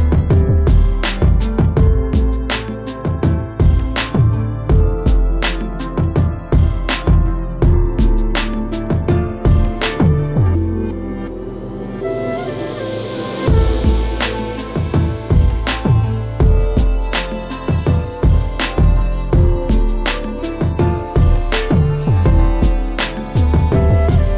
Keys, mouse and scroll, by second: 0.7 ctrl+j, 1.2 ctrl+j, 2.4 click, 4.1 click, 4.7 click, 5.7 middle click, 5.9 middle click, 5.9 middle click, 6.0 middle click, 7.0 click, 7.6 q, 8.3 middle click, 9.0 click, 9.6 scroll, 9.9 ctrl+j, 10.3 ctrl+j, 11.3 q, 12.6 scroll, 13.2 middle click, 13.2 click, 14.0 ctrl+j, 14.4 ctrl+j, 15.3 q, 15.8 click, 16.4 alt+middle click, 16.6-17.4 scroll, 17.9 alt+middle click, 18.5 click, 19.1 alt+scroll, 20.2 click, 21.4-22.6 typing, 23.6-24.3 typing.